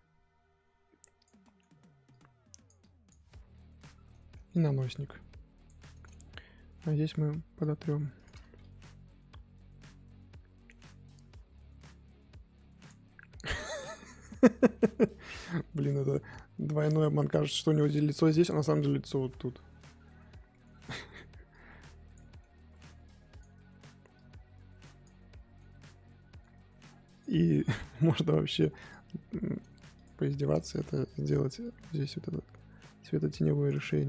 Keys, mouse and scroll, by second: 1.4 middle click, 2.1-3.3 drag, 3.3 scroll down 1, 3.4 middle click, 3.9-4.3 scroll up 2, 4.3 middle click, 4.9 click, 5.8-7.6 middle drag, 7.6 click, 8.4 ctrl+z, 8.6-11.6 drag, 13.0-13.4 scroll down 10, 13.4 middle click, 13.9-14.8 scroll up 7, 14.2 middle click, 14.8 middle click, 15.0 scroll up 2, 15.3 middle click, 16.0-17.2 drag, 17.2 scroll down 1, 17.5-19.2 middle drag, 19.2-19.7 scroll down 5, 19.7 middle click, 19.9-20.5 scroll up 7, 20.5 middle click, 20.7 scroll up 1, 20.9 middle click, 21.5 click, 22.2 middle click, 22.4-22.9 scroll down 1, 22.9 f, 23.5 scroll up 2, 24.1-25.3 drag, 25.3 middle click, 25.7-26.3 scroll down 3, 27.1 click, 27.3 middle click, 27.5-28.3 scroll up 3, 28.3 f, 29.2 scroll up 1, 29.3 f, 30.2 shift+middle click, 30.4 scroll down 1, 30.5-31.6 middle drag, 31.6-33.8 drag, 33.8-34.0 scroll down 5.